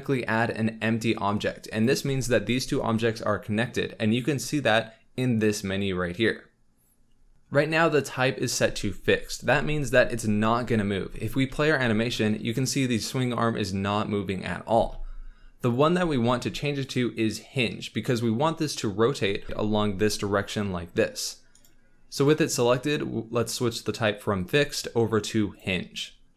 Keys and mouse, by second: 1.8 click, 11.4 space, 14.7 space, 15.6 click, 16.8-18.9 drag, 19.4 r, 19.4 x, 19.4 y, 24.5-25.6 drag.